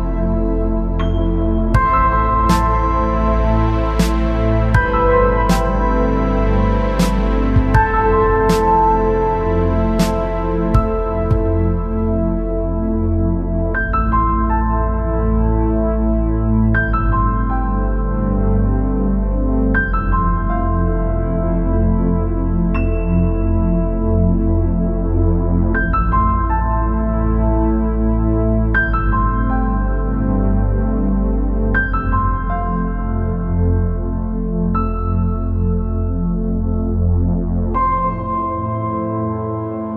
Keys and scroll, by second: 8.7-9.4 space, 10.4 ctrl+z, 22.1-22.5 space, 39.3 ctrl+z.